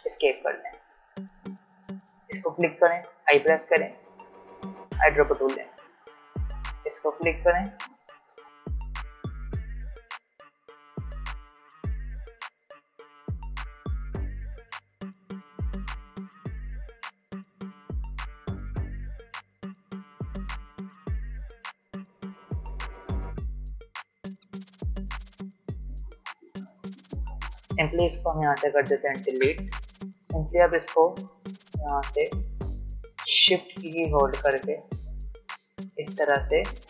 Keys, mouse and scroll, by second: 1.4 v, 1.9 click, 2.9 i, 3.9 click, 5.2 v, 6.7 click, 8.4 ctrl+z, 8.5-14.2 typing, 8.6 click, 8.9 click, 9.3 alt+scroll down 1, 9.7 click, 10.0 click, 10.5 click, 10.8 click, 11.1 click, 11.3 alt+scroll up 1, 11.7 click, 12.0 click, 12.2 click, 12.3 alt+scroll down 1, 12.5 click, 13.0 click, 13.3 click, 13.5 click, 13.8 click, 13.9 alt+scroll down 1, 14.4 click, 14.5 right click, 14.7 click, 14.8 alt+scroll up 1, 15.0 alt+click, 15.4-22.4 typing, 15.9 click, 16.2 click, 16.5 click, 16.7 click, 16.9 alt+scroll down 1, 17.4 alt+scroll up 1, 17.5 alt+click, 17.9 click, 18.3 click, 18.9 click, 19.1 click, 19.2 alt+scroll down 1, 19.4 alt+scroll up 1, 19.6 click, 19.9 click, 20.2 click, 20.3 click, 21.2 click, 21.5 click, 21.5 alt+scroll down 1, 21.9 click, 22.2 click, 22.4 click, 22.5 alt+scroll down 1, 22.7-23.0 alt+scroll up 1, 23.4 ctrl+alt+2, 23.5 click, 24.2 alt+scroll down 1, 24.9 alt+click, 25.1 i, 25.4 click, 25.7 v, 26.4 space, 26.6 click, 27.3 alt+scroll up 1, 28.5-36.8 drag.